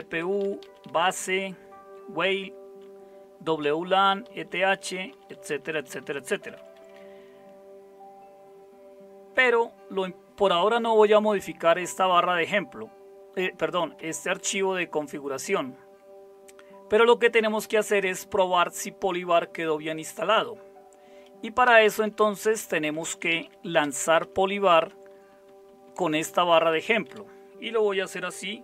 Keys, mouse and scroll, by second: 0.2 Down, 0.4 Down, 0.6 Down, 1.0 Down, 1.2-2.7 Down, 2.9 Down, 3.6 Down, 3.8 Down, 4.0 Down, 4.2 Down, 4.5 Down, 4.7 Down, 4.9 Down, 5.1 Down, 5.3 Down, 5.4 Down, 5.7 Down, 5.9 Down, 6.4 Up, 6.5 Up, 6.7 Up, 6.9-21.6 Up, 21.6 Down, 22.0 Down, 22.2 Down, 22.4 Down, 22.6 Down, 23.2 Down, 24.9 Up, 25.1 Right, 25.3 Right, 25.4 Right, 25.7 Right, 25.8 Right, 26.9 Left, 27.0 Left.